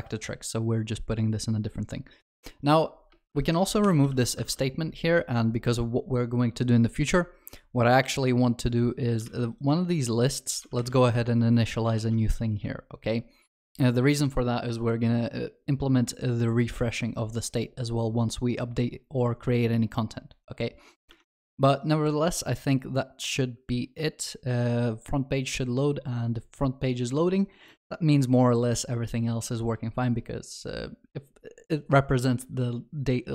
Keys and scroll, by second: 3.3 ctrl+y, 4.3 ctrl+alt+shift+l, 4.4 ctrl+s, 8.0 ctrl+d, 9.2 ctrl+c, 11.9 ctrl+alt+shift+l, 12.3 ctrl+s.